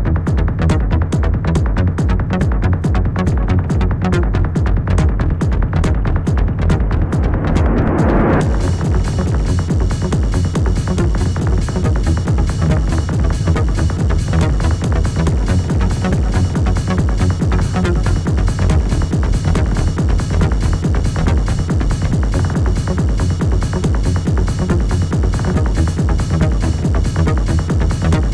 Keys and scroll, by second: 2.6 space, 18.5 space.